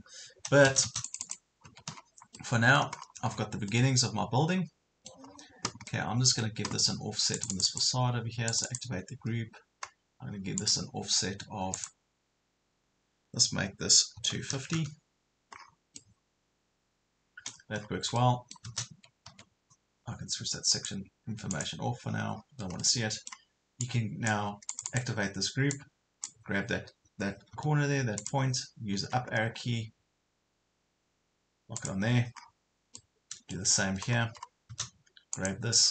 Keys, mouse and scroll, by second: 1.1 click, 1.6 Escape, 1.9 scroll down 1, 2.4 middle click, 3.0 scroll up 1, 3.7 middle click, 5.3 scroll up 1, 5.9-7.0 middle drag, 7.4 click, 14.2 KP_2, 14.4 KP_5, 14.6 KP_0, 15.6 scroll down 2, 16.0 middle click, 17.8 scroll up 1, 18.2 middle click, 18.9 Escape, 20.8 click, 22.4 scroll up 1, 22.8 middle click, 23.8 click, 25.9-27.0 drag, 27.5 m, 28.2 click, 29.4 scroll down 1, 31.8 click, 32.4 scroll down 1, 33.0 middle click, 33.7 scroll up 1, 34.5 scroll up 1, 35.4 click.